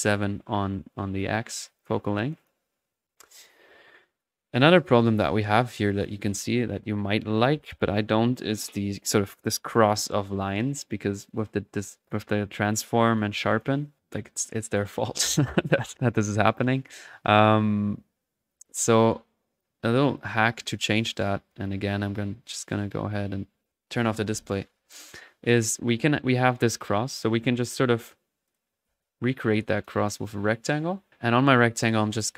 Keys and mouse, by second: 2.6 middle click, 16.7-17.7 drag, 17.6 right click, 18.5 right click, 19.5 click, 20.3 click, 21.5 click, 23.0 click, 24.9-27.4 middle drag, 27.4-27.8 drag, 28.4 middle click, 28.7-29.5 typing, 29.8 drag, 30.1 click, 31.7-32.3 drag.